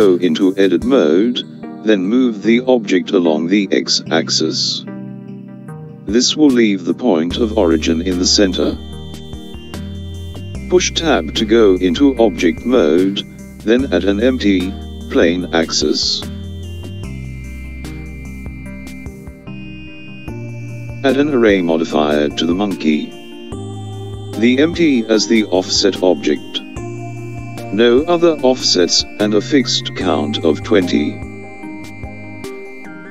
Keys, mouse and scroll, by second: 0.8 g, 9.2 Tab, 12.0 click, 19.9 click, 22.1 click, 28.5 click, 31.4 click, 32.3 click.